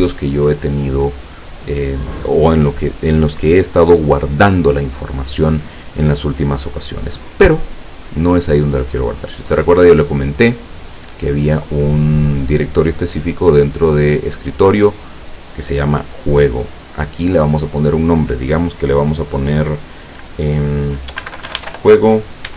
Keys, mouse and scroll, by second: 9.4 click, 10.3 click, 17.5 click, 21.3-21.8 typing.